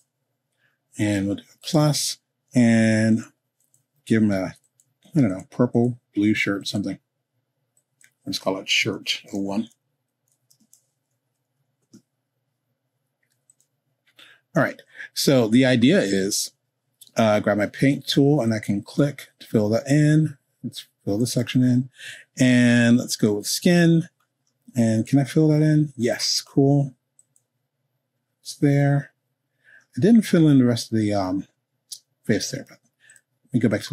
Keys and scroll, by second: 8.7-11.8 typing.